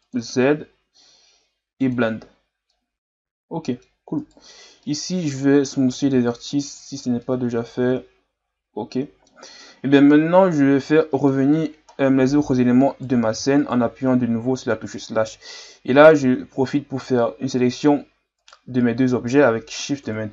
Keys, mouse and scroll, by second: 0.0 click, 1.8 click, 2.7-4.2 middle drag, 4.2 right click, 4.9-6.0 middle drag, 6.0 w, 7.2-9.6 middle drag, 9.6-11.0 scroll down 1, 11.0 middle click, 11.4-11.9 scroll up 1, 11.9-12.9 middle drag, 12.9 right click, 13.6 shift+right click, 16.2 g, 20.0 KP_Divide.